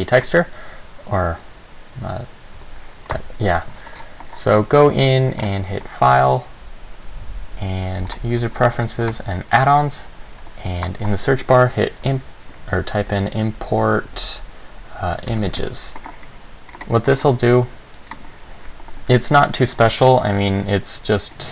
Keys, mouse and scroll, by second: 3.3 KP_7, 4.2-4.5 scroll down 3, 4.5-5.1 scroll up 2, 5.6 click.